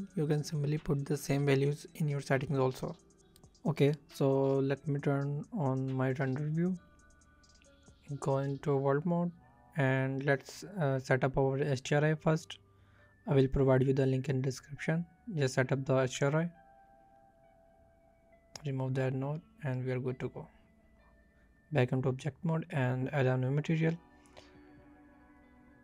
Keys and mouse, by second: 1.1 middle click, 1.9 middle click, 2.4 click, 4.8 shift+middle click, 6.7 click, 8.5-9.0 drag, 9.5 click, 10.4 click, 10.8 click, 12.2 click, 17.7-18.1 drag, 18.6 click, 20.2-20.8 drag, 21.8 click, 23.3-25.7 drag.